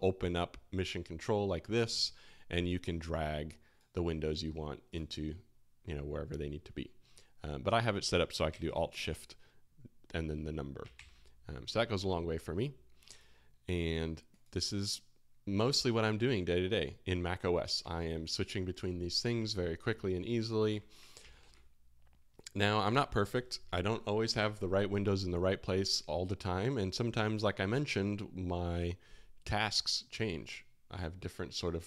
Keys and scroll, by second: 8.4 alt+shift+1, 10.9 alt+shift+2, 11.9 alt+1, 19.5 alt+1, 19.8 alt+2, 20.2 alt+1, 20.6 alt+2, 21.2 alt+1.